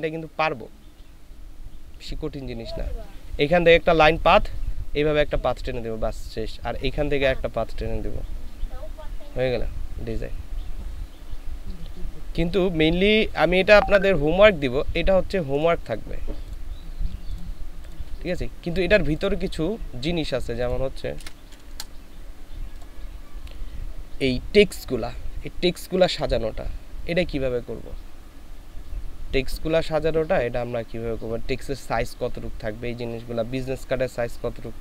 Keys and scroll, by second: 21.2 ctrl+v, 21.7 ctrl+Return.